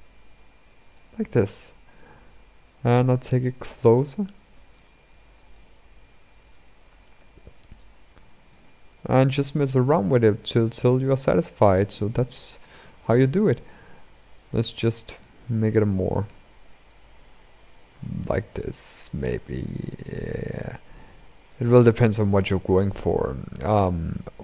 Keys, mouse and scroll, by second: 1.1-2.7 scroll down 6, 2.7-8.6 drag, 8.6-10.5 shift+middle drag, 10.5-10.9 scroll up 2, 10.9-13.7 middle drag, 13.7-15.1 drag, 15.1-16.7 scroll down 7, 16.7-19.6 drag, 21.6-22.3 scroll up 6, 22.3-24.0 middle drag, 24.0-24.4 scroll down 5.